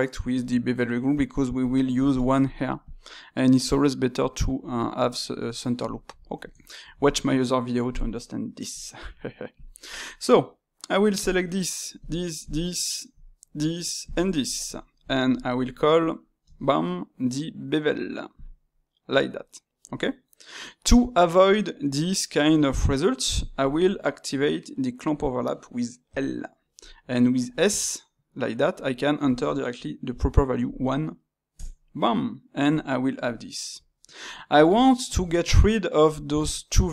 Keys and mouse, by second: 1.6 click, 2.4-5.5 drag, 5.5-9.5 middle drag, 9.5-11.2 drag, 11.9 shift+click, 12.4 shift+click, 12.7 middle click, 13.5 shift+click, 14.0 shift+click, 14.3-16.4 middle drag, 16.4 space, 33.2-36.9 middle drag.